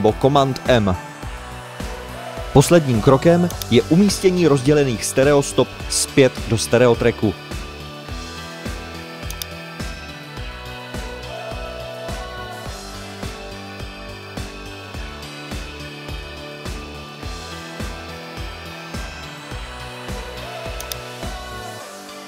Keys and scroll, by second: 3.7 shift+super+n, 4.5 super+Right, 15.0-16.0 typing.